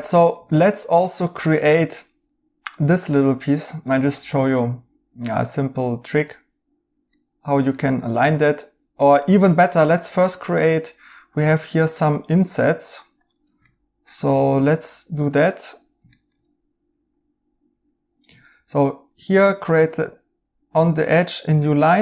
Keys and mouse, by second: 7.1 right click, 9.1 right click, 13.6 right click, 15.2 Tab, 16.1 right click, 18.5 a.